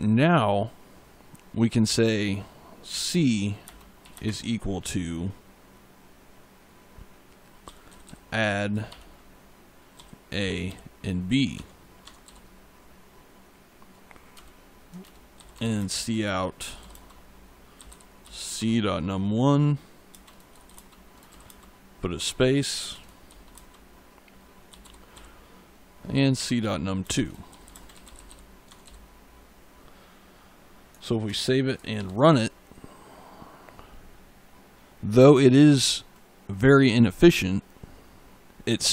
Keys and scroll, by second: 2.7 c, 3.5 space, 3.9 =, 4.0 space, 7.5 a, 7.7 d, 8.7 shift+9, 9.8 a, 10.5 b, 11.4 Tab, 12.1 ., 14.2 Return, 15.0-18.2 typing, 18.4 Tab, 20.0 space, 20.6 shift+space, 21.2 shift+', 21.3 space, 22.0 Tab, 22.6 space, 23.4 shift+space, 24.6 c, 25.0 n, 26.0 Down, 26.2 Tab, 26.9-28.7 typing, 31.1 ctrl+s, 31.8 ctrl+F5.